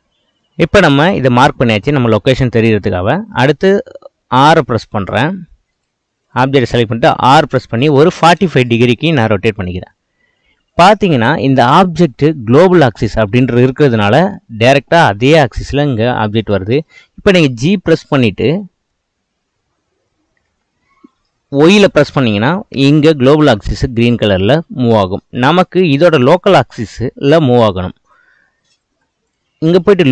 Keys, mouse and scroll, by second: 5.7 click, 6.3 click, 7.3 r, 18.0-20.5 middle drag, 20.5 g, 25.3-28.4 middle drag, 29.3-30.1 drag.